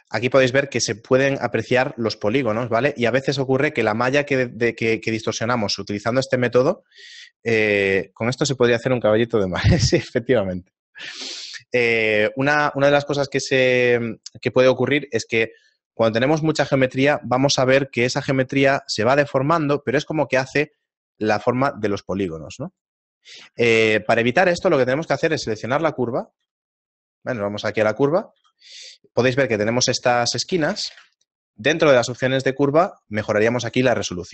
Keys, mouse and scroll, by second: 0.7 right click, 2.6 Tab, 4.9 middle click, 5.4-5.7 scroll down 3, 25.3 right click, 26.1 right click, 26.4 z, 27.4 right click, 28.0 z, 28.3 z, 29.6-30.1 scroll up 1, 30.1-31.3 scroll up 9, 31.5 click, 33.6-34.3 click.